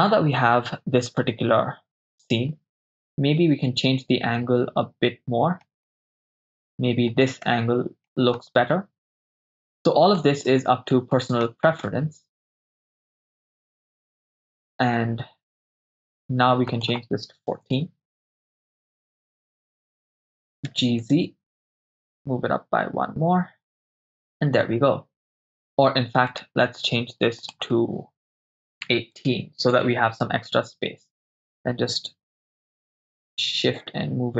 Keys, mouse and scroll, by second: 3.2 middle click, 5.9 shift+middle click, 7.5-8.5 middle drag, 10.2 middle click, 11.9 shift+middle click, 13.3-14.1 ctrl+middle drag, 14.5 shift+middle click, 16.7-17.8 drag, 19.4 click, 19.4 right click, 20.7 g, 21.0 z, 23.8 ctrl+click, 26.3-27.4 right drag, 27.4-29.8 drag, 33.3 shift+middle click.